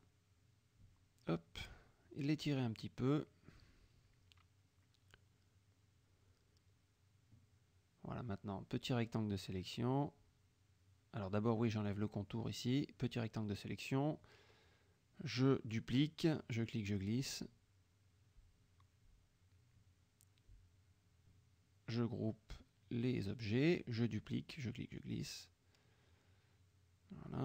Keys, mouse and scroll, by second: 0.4 shift+click, 1.1 click, 1.8 shift+click, 3.0-4.4 shift+drag, 4.5 shift+F1, 4.7 shift+KP_Subtract, 5.4 shift+F1, 5.6 shift+click, 6.2 shift+click, 6.8 shift+click, 8.1 click, 8.6-10.0 drag, 11.8 shift+click, 12.5 click, 15.8 ctrl+d, 16.2-18.5 ctrl+drag, 20.3-21.1 drag, 21.8 ctrl+g, 22.2-23.1 ctrl+drag, 23.0 ctrl+g, 23.8 click, 24.3-27.3 drag, 24.5 space.